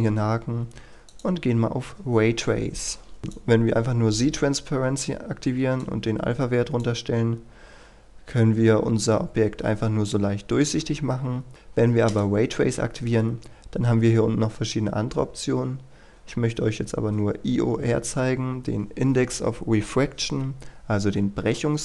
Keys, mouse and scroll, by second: 1.1 click, 7.1-10.0 scroll up 1, 10.0-11.4 scroll down 1, 11.5 click, 13.8-18.1 scroll down 1, 18.1-18.4 scroll up 1.